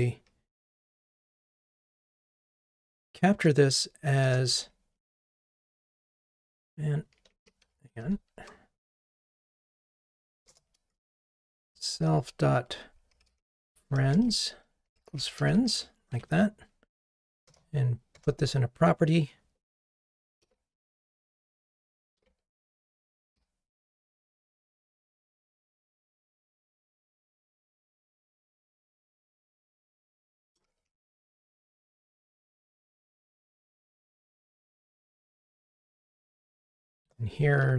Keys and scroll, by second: 7.3 super+a, 8.0 alt+super+l, 9.2 Escape, 16.1 Escape, 17.5 alt+Return, 24.0 Escape.